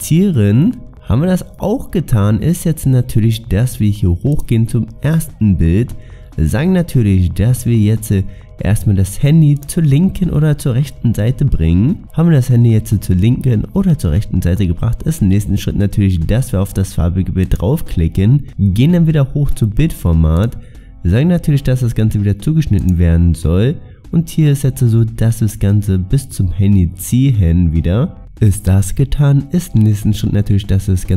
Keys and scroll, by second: 0.2 ctrl+v.